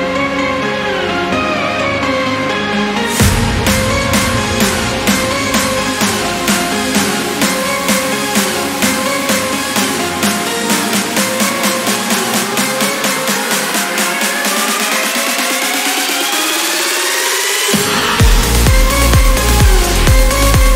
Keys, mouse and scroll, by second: 1.4 click, 3.9 click, 5.3 4, 5.8 click, 7.2 click, 8.1 click, 8.5-10.1 drag, 10.9-11.3 scroll down 2, 11.3 click, 15.9 click, 18.2 click, 19.1 click.